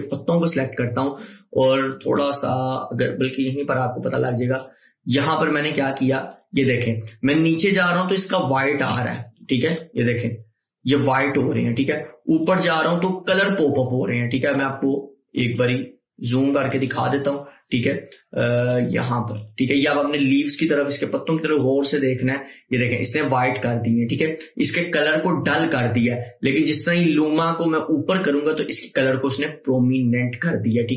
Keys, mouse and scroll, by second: 0.2 click, 4.4-14.4 drag, 15.7 click, 15.7-21.7 drag, 21.7-30.9 drag.